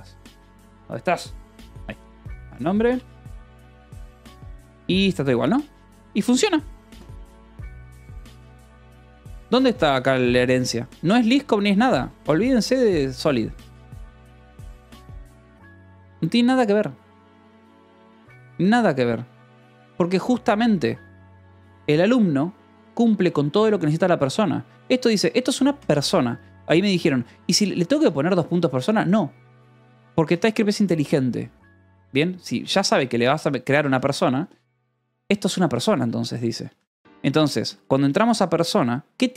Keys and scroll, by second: 0.0-0.2 typing, 1.2-4.5 typing, 5.9 j, 6.8 shift+v, 8.9 Escape, 10.3 k, 11.0 j, 11.4 g, 12.3 j, 13.5 k, 14.2 j, 15.0 j, 24.8 h, 26.2 shift+k, 27.7 Escape, 27.9 k, 29.6 l, 30.7 shift+k, 32.4 Escape, 32.9-35.8 typing, 36.2 Escape, 37.2 ctrl+s, 38.2 shift+l.